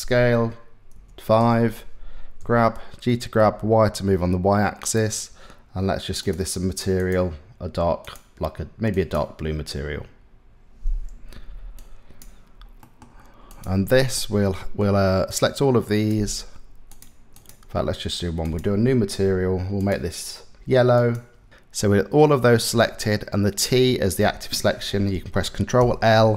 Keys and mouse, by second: 2.0 g, 6.7-11.9 drag, 12.4 click, 13.2 click, 14.1 middle click, 14.9 click, 16.5 click, 18.0 click, 19.5 click, 25.4 ctrl+l.